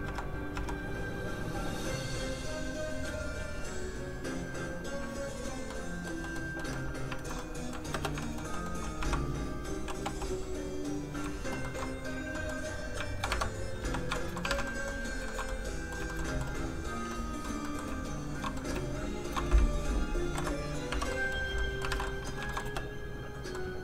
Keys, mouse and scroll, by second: 0.1 click, 0.4 click, 0.5 1, 0.8 click, 5.7 middle click, 7.2 alt+shift+z, 7.4 middle click, 7.9 space, 8.2 shift+middle click, 8.5 middle click, 8.6 middle click, 10.0 1, 10.6 click, 10.6 3, 11.6 shift+middle click, 12.1 middle click, 12.3 middle click, 13.1 shift+click, 13.3 shift+Tab, 13.6 scroll up 1, 13.8 1, 14.1 shift+middle click, 14.4 alt+middle click, 14.5 alt+a, 14.7 middle click, 15.3 shift+middle click, 15.5 middle click, 16.1 shift+middle click, 16.3 middle click, 16.8 click, 17.1 middle click, 18.3 shift+click, 18.6 middle click, 19.0 shift+click, 20.2 ctrl+shift+p, 20.6 click, 20.9 Tab, 21.1 middle click, 21.3-21.6 scroll down 1, 21.6 middle click, 21.9 alt+a, 22.4 middle click, 22.5 shift+middle click, 22.6 shift+space, 22.9 scroll down 1, 23.5 middle click.